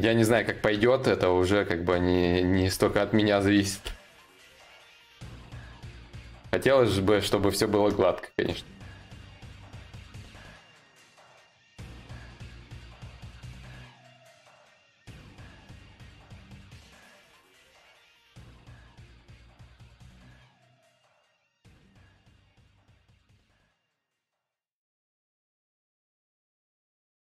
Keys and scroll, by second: 3.4 ctrl+z.